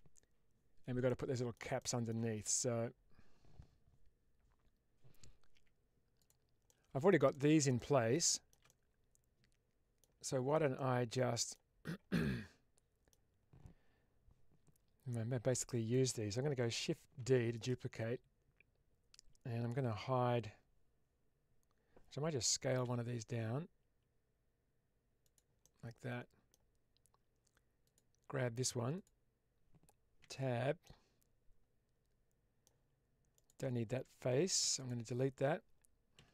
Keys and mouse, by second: 0.9 middle click, 1.7 shift+middle click, 5.4 Tab, 6.1 click, 6.5-7.1 middle drag, 7.2-7.5 middle drag, 7.6-8.1 middle drag, 8.3 middle click, 8.5-9.9 middle drag, 10.2 shift+middle click, 10.6-11.5 middle drag, 12.1-13.0 middle drag, 15.0-15.8 middle drag, 17.1 shift+d, 17.5 right click, 25.2 click, 25.2 s, 25.5-26.4 middle drag, 27.8 click, 28.8 click, 30.1 Tab, 30.7-32.6 middle drag, 33.2 click, 34.5 3, 34.7 click.